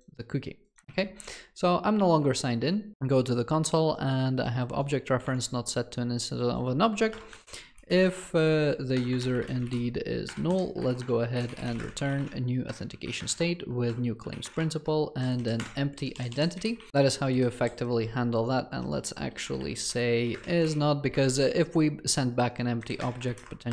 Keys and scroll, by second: 9.0 Return, 21.2 Escape.